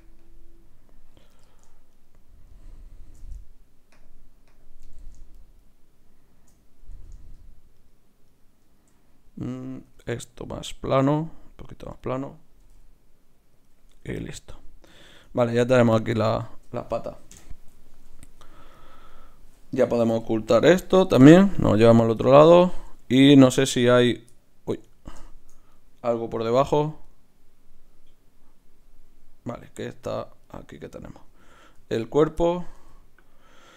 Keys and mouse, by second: 1.9 click, 2.8-4.0 right drag, 5.3-7.3 right drag, 7.8-10.0 right drag, 9.8 s, 12.6 g, 13.9 Tab, 17.3 KP_Divide, 18.2 z, 19.1-20.7 drag, 20.1 m, 22.2-26.9 middle drag, 25.7-29.1 right drag, 26.4 g, 29.6 right click, 30.1 z, 31.3 z, 31.8 g, 32.7 g.